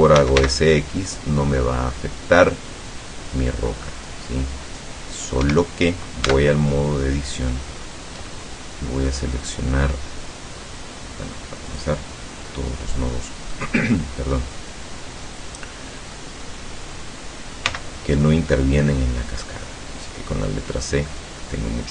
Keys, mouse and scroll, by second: 0.2 s, 0.5 x, 5.5 Escape, 6.3 Tab, 6.7-7.7 middle drag, 7.9 scroll up 1, 8.3 middle click, 11.7 click, 12.5 middle click, 13.3 scroll up 1, 13.6 middle click, 15.3-16.3 middle drag, 17.8 c, 19.0-19.5 scroll down 2, 20.1-21.9 drag.